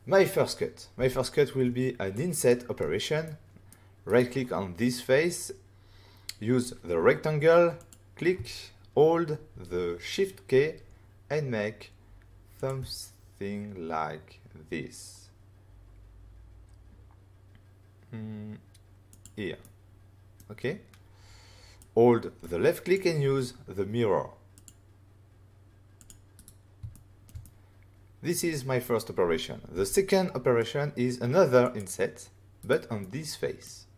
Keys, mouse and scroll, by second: 0.9 f, 2.1 click, 3.2 middle click, 4.0 right click, 7.7 click, 12.5 shift+click, 19.1 click, 19.6 middle click, 21.7 click, 24.5 click, 25.9 click, 26.0 click, 26.3 right click, 26.4 right click, 26.9 shift+middle click, 27.4 middle click, 27.7 scroll down 1, 28.3 scroll up 1, 29.7 f, 31.6 click, 32.5 right click, 32.9 middle click.